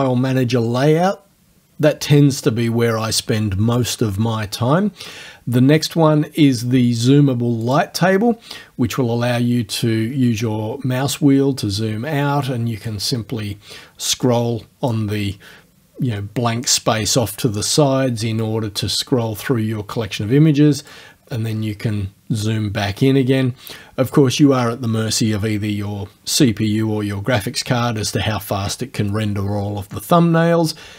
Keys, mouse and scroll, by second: 7.7 click, 9.0-9.6 scroll down 2, 9.7-10.4 scroll down 4, 10.7 scroll down 2, 12.5 click, 14.3-15.1 drag, 18.4-21.1 drag, 21.5-22.0 scroll up 1.